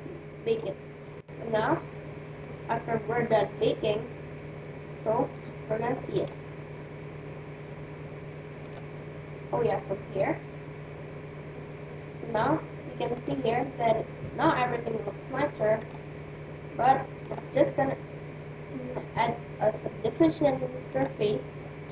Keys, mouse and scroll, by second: 0.5-1.5 drag, 1.5-5.2 middle drag, 6.2-8.0 drag, 8.6-10.4 drag, 10.0-12.1 middle drag, 13.2-15.0 drag, 15.8-19.2 drag.